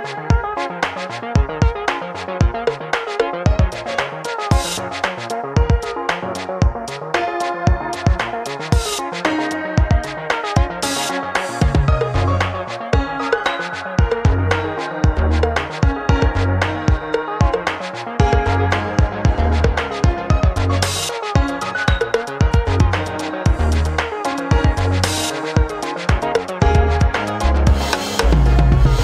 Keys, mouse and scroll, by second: 0.5 click, 3.3 shift+a, 7.2 click, 7.3 right click, 7.7-10.2 middle drag, 8.7 click, 13.5 shift+a, 17.4 s, 20.2-29.0 right drag, 26.6 click, 26.6 middle click, 27.7 click, 27.7 middle click.